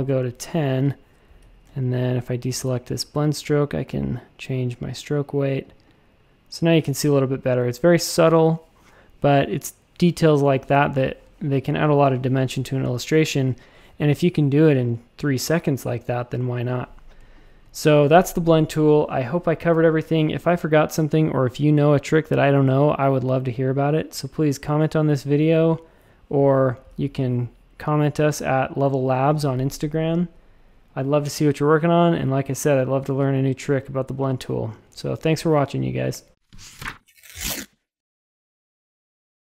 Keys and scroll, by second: 1.4 a, 6.8 shift+super+a, 7.0 space, 11.2 space, 17.1 space.